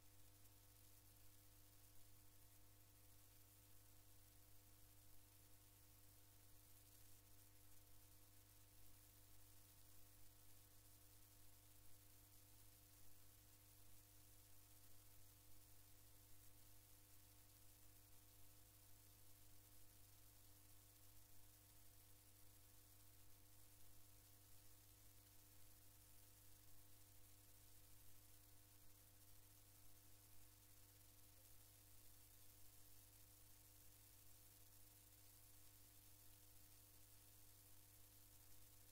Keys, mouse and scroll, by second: 6.1-9.7 drag, 10.2-15.3 drag, 16.4-18.2 drag, 19.3-22.3 drag, 23.1 click, 30.4 click, 31.3 click.